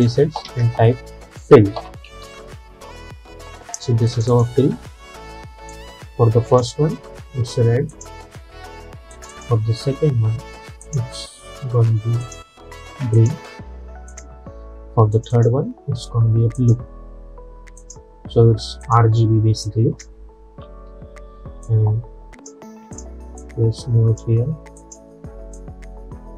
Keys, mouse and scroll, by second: 0.5 ctrl+a, 1.4-2.8 typing, 4.2-20.7 drag, 20.7 =, 21.0 =, 21.7-26.3 drag.